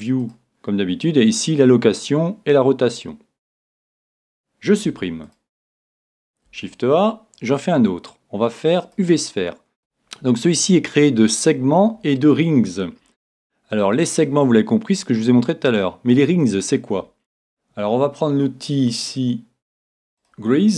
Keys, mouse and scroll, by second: 4.9 x, 6.5 shift+a, 20.2-20.7 drag.